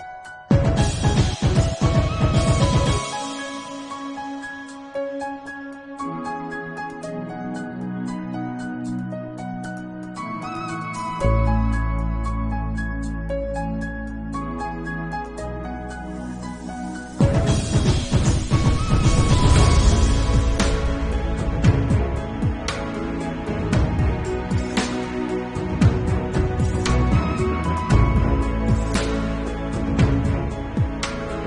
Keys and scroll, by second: 0.3 ctrl+s, 1.2 8, 1.7 ctrl+alt+z, 2.9 9, 8.2 ctrl+alt+z, 8.3 1, 9.4 ctrl+s, 9.7-10.9 typing, 10.4 ctrl+alt+z, 11.4 ctrl+s, 12.0 [, 12.9 ctrl+s, 14.8 2, 14.9 [, 15.8 ctrl+s, 16.6 ctrl+alt+z, 16.9 0, 16.9 3, 17.0 0, 18.0 ctrl+s, 21.1 b, 21.7 ], 22.8 ], 23.1 3, 26.2 ctrl+s, 31.0 4.